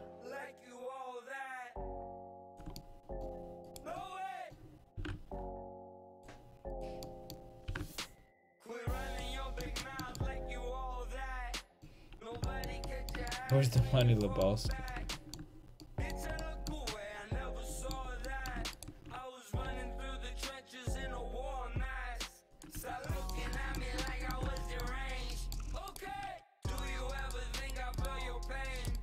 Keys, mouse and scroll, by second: 3.7 click, 3.7 right click, 5.0 g, 7.7 g, 8.9 a, 12.1 middle click, 18.8 right click, 19.7 s, 22.8 a, 24.2 click, 25.9-28.9 drag, 25.9-29.0 right drag.